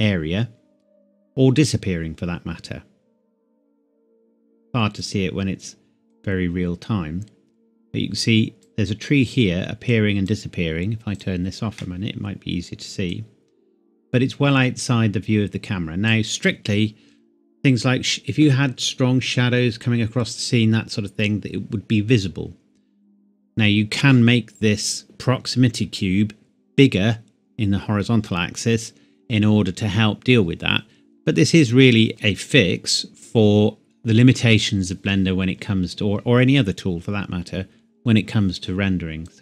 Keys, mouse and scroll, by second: 3.6 click, 39.3 click.